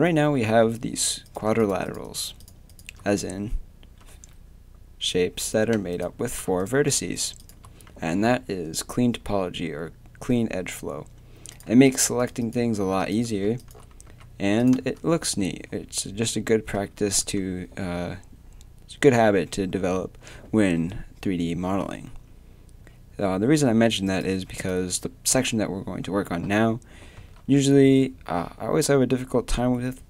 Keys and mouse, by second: 1.3-9.5 right drag, 8.1 a, 11.5-13.6 right drag, 14.1 a, 15.4 a, 24.1-27.2 right drag, 27.2 a.